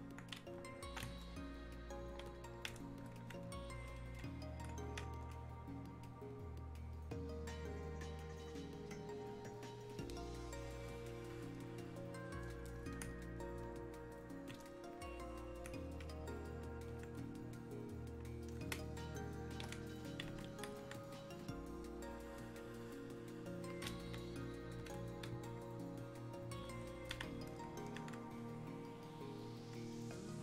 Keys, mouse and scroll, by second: 11.0-11.6 scroll down 1, 13.1-13.8 scroll up 1, 13.8-18.7 alt+drag, 18.7 ctrl+space, 20.8-23.7 alt+drag.